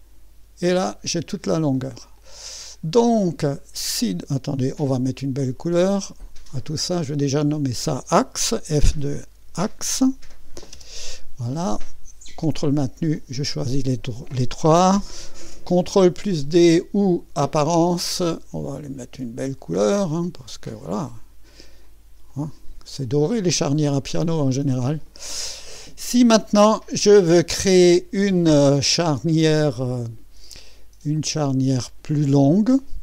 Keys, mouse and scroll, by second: 1.6 middle click, 2.2 click, 3.1-4.4 scroll up 1, 4.4-6.7 scroll up 1, 7.5 click, 9.2-10.7 typing, 13.2 click, 16.4-17.6 scroll down 1, 17.3-18.1 typing, 17.6-19.8 drag, 20.2-26.4 drag, 23.5-24.3 typing, 25.6-26.4 typing, 26.4-27.2 scroll up 1, 27.4-31.0 middle drag, 31.2-33.0 drag.